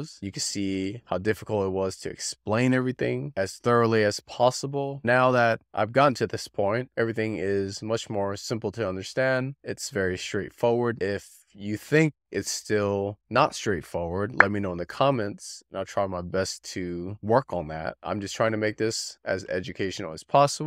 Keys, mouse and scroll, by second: 0.4-1.5 shift+middle drag, 1.9-2.2 scroll up 3, 2.2-2.9 middle drag, 4.0-5.1 shift+middle drag, 5.5-5.8 scroll up 3, 5.8-6.4 middle drag, 7.6-8.8 shift+middle drag, 9.1-9.4 scroll up 3, 9.4-10.1 middle drag, 11.3-12.4 shift+middle drag, 12.8-13.1 scroll up 3, 13.1-13.7 middle drag, 14.9-16.0 shift+middle drag, 16.4-16.7 scroll up 3, 16.7-17.4 middle drag, 18.5-19.7 shift+middle drag, 20.0-20.3 scroll up 3, 20.3-20.6 middle drag.